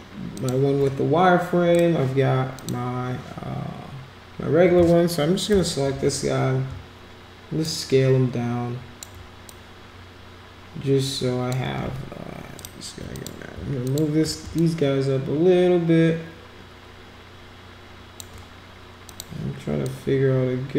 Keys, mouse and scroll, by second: 0.4 shift+click, 1.7 click, 2.6 click, 7.6-9.0 shift+drag, 9.5-11.5 drag, 12.5 click, 13.1 click, 13.8 shift+click, 14.6-18.2 shift+drag, 19.1 click, 19.8-20.7 drag.